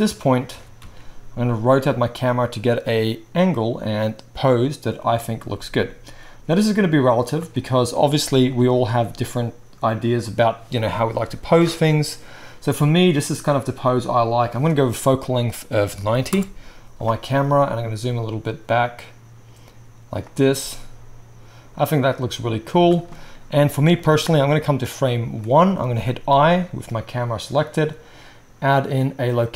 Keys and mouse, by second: 0.5 r, 5.1-6.6 drag, 13.4-14.3 drag, 17.4 g, 20.2-24.0 drag, 20.6 g, 26.3 |.